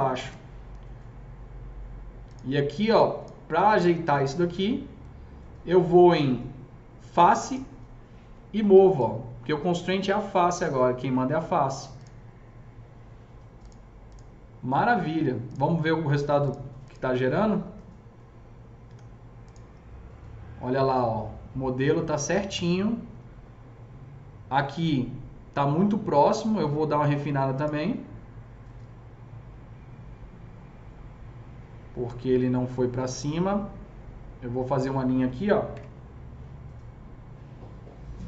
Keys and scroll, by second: 0.3 ctrl+BackSpace, 8.7 s, 18.0 F4, 18.7 F4, 35.6 KP_0.